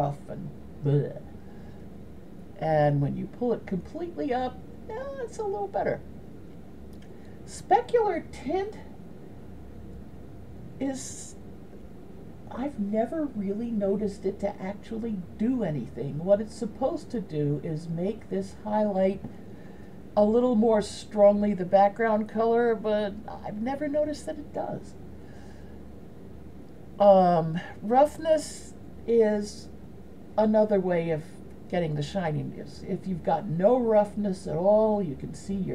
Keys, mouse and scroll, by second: 9.1-12.0 drag, 29.6-32.7 drag.